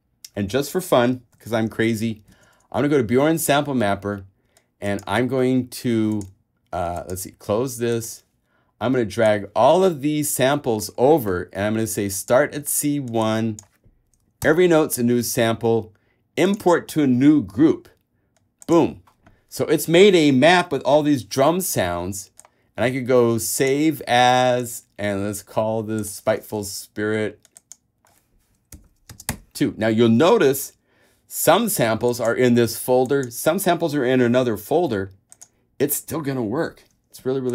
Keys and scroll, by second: 1.7 super+Tab, 14.6 |, 28.9 Right, 29.3 space, 29.5 2.